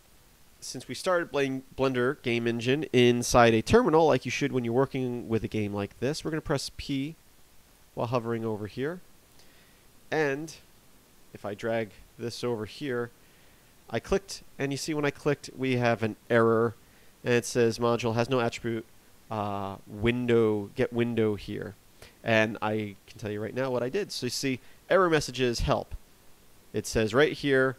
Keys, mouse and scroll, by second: 7.6 click.